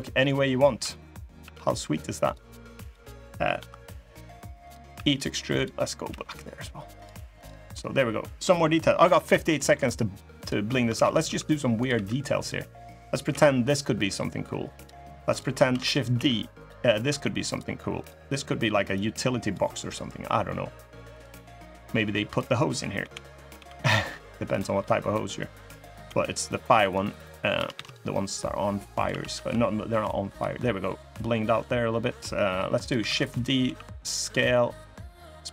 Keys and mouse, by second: 2.6 click, 3.3 i, 4.7 e, 5.8 g, 7.5 click, 8.8 click, 9.2 shift+click, 9.6 middle click, 10.7 shift+d, 11.0 s, 11.7 e, 13.0 l, 13.8 g, 15.1 click, 15.4 shift+d, 15.9 s, 16.8 e, 18.7 click, 19.6 middle click, 20.9 click, 21.6 click, 22.7 l, 23.3 g, 24.5 middle click, 25.4 click, 25.7 l, 26.7 click, 27.5 shift+d, 28.0 click, 28.8 s, 30.3 middle click, 30.4 click, 32.6 click, 32.8 shift+d, 33.4 s, 34.5-35.5 drag.